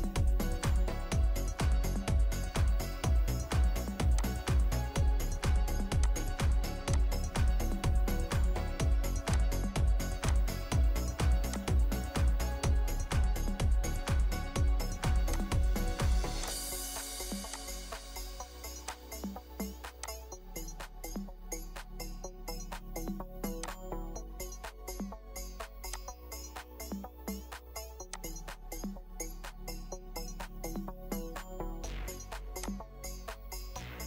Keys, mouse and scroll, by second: 1.1 scroll up 1, 1.1 scroll down 1, 1.4 middle click, 24.6-24.9 scroll down 1, 24.9 middle click, 30.3-30.6 scroll up 1, 30.6 scroll down 1, 30.9 scroll up 1, 31.7 scroll down 1.